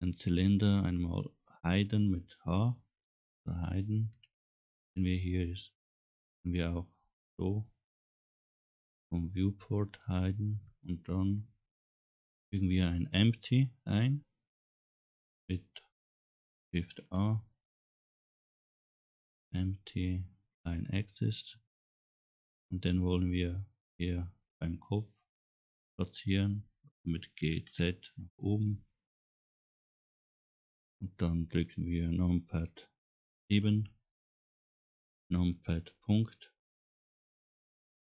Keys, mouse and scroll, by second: 4.1 h, 5.9 click, 6.7 click, 7.3 click, 8.0 click, 8.9-9.3 scroll up 2, 9.7 middle click, 10.0-10.4 scroll up 2, 12.0 middle click, 17.0 shift+a, 25.3 scroll down 2, 25.5 middle click, 25.5 scroll up 1, 27.4 g, 33.4 KP_7, 36.6 KP_Decimal.